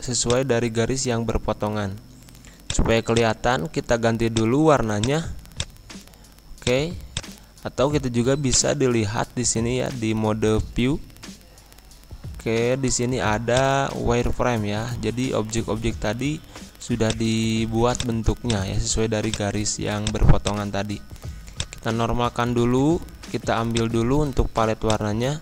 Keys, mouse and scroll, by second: 2.6 click, 6.0-6.4 scroll down 1, 6.6 click, 13.5 click, 14.3-14.6 scroll up 1, 15.4-15.8 scroll down 1, 17.0 click.